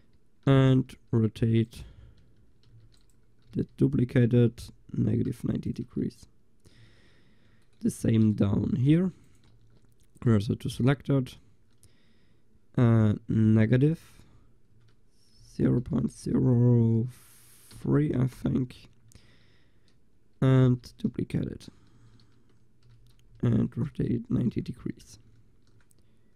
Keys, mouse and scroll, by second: 0.6 r, 2.2 middle click, 2.7 shift+d, 3.5 r, 5.9 click, 6.9 a, 9.6 shift+s, 10.4 click, 11.0-12.2 drag, 20.7 l, 21.4 scroll down 1, 21.5-22.0 scroll up 1, 22.0 shift+d, 24.1 click, 24.4 Tab.